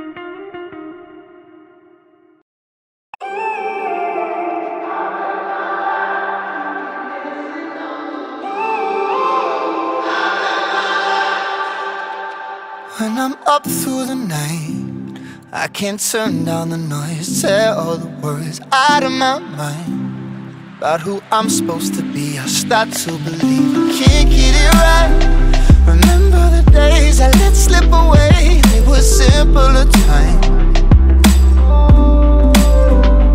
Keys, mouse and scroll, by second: 0.5 scroll down 1, 0.8 alt+click, 0.9 alt+right click, 1.0 alt+click, 1.1 alt+right click, 1.2-1.9 alt+drag, 2.3-3.0 alt+drag, 3.2 alt+click, 3.4 alt+right click, 3.5-4.9 alt+drag, 4.9 Tab, 5.1 Tab, 5.4-6.1 alt+drag, 6.7 click, 7.1 alt+click, 7.8 alt+click, 9.2-10.7 drag, 11.0 alt+click, 12.2-13.1 scroll down 7, 13.1 Tab, 13.5 alt+click, 14.3 z, 14.9 click, 15.3 e, 16.5 click, 16.7 ctrl+b, 18.7 alt+click, 19.0 Tab, 19.1 alt+click, 19.7 right click, 20.0 q, 20.2 alt+right click, 20.2 alt+drag, 20.4 alt+middle click, 20.7 alt+right drag, 21.3 Tab, 21.4 scroll down 5, 21.6 alt+click, 22.2 ctrl+z, 22.9 drag, 23.9 Tab, 24.1 click, 24.4 click, 25.2 shift+a, 25.6 KP_0, 25.8 n, 26.1 scroll up 2, 26.5 click, 26.7 n, 27.0 alt+right click, 27.2 alt+middle drag, 27.3 alt+right click, 27.8 alt+click, 27.9 alt+middle click, 28.0 alt+right drag, 28.2 alt+click, 28.3 alt+middle drag, 28.5 alt+right drag, 28.7 alt+middle click, 28.8 alt+click, 29.1 alt+middle drag, 29.2 alt+right drag, 29.4-29.7 alt+middle drag, 29.7 alt+right click, 29.8 alt+middle drag, 30.1-31.6 alt+right drag, 31.6-33.3 drag.